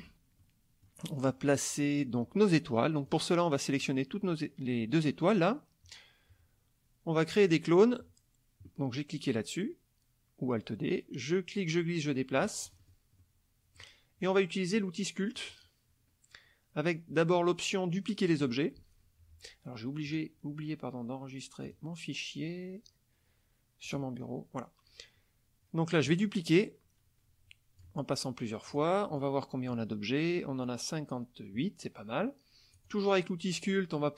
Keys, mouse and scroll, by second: 0.4 middle click, 3.1-4.0 drag, 7.4 click, 11.6 click, 12.7 middle click, 12.7 scroll, 13.2 middle click, 13.2 scroll, 13.7 click, 15.4 click, 18.3 click, 20.1 click, 21.6 click, 23.9 click, 26.1-28.0 drag, 28.7 click, 29.2-29.9 drag, 32.8 click.